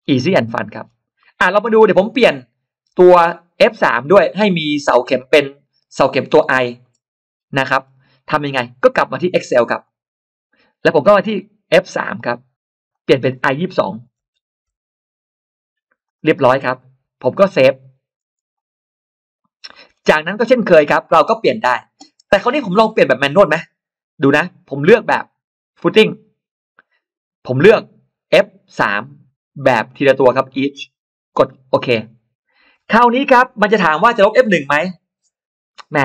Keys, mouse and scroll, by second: 0.2-0.5 scroll up 1, 0.6-1.0 scroll down 1, 1.0 middle click, 2.0-2.4 scroll up 2, 4.0-5.5 scroll up 2, 4.3-6.6 middle drag, 5.5-6.6 scroll up 1, 7.1-7.4 scroll down 1, 7.4 middle click, 9.7 click, 11.9 click, 12.8 click, 14.2 shift+j, 15.9 click, 18.4 click, 19.5 middle click, 20.1 middle click, 20.6-20.9 scroll up 1, 25.6 click, 27.4 click, 28.6 click, 29.4 click, 30.3 click, 31.6 click.